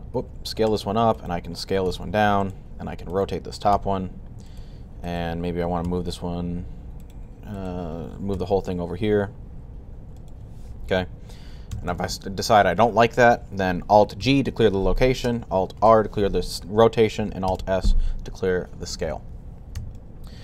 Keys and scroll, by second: 0.0 typing, 1.7 typing, 3.6 typing, 5.7 g, 11.6 a, 13.9 alt+g, 15.7 alt+r, 17.4 alt+s.